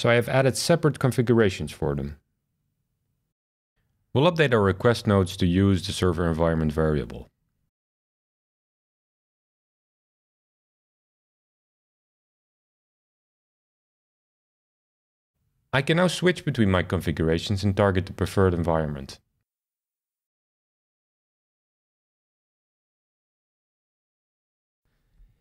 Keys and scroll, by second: 4.3 alt+shift+Left, 4.4 alt+shift+Left, 4.5 alt+shift+Left, 4.6 alt+shift+Left, 4.7 alt+shift+Left, 4.8-5.3 alt+shift+Left, 5.2 shift+[, 5.3 shift+[, 5.6 Return, 7.7-9.3 alt+shift+Left, 8.5 shift+[, 8.6 shift+[, 8.9 Return, 11.0-11.5 alt+shift+Left, 11.8 shift+[, 11.9 shift+[, 12.2 Return, 14.0 shift+super+r, 19.7 shift+super+r.